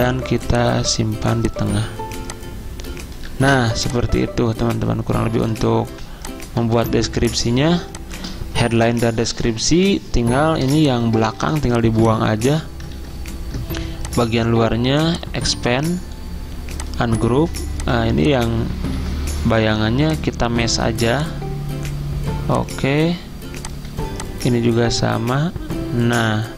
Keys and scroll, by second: 3.6 z, 5.9 v, 7.0 z, 12.9 ctrl+z, 18.9 ctrl+z.